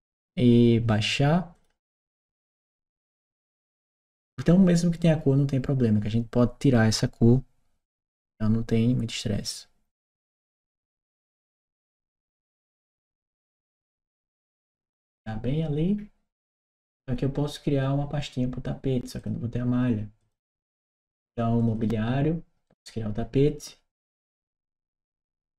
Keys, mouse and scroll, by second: 1.3 click, 11.3 click, 12.6 click, 15.0 scroll down 1, 16.6 scroll up 1, 18.9 click, 19.9 click, 21.3 click, 21.5 click, 22.4 right click, 24.2 click.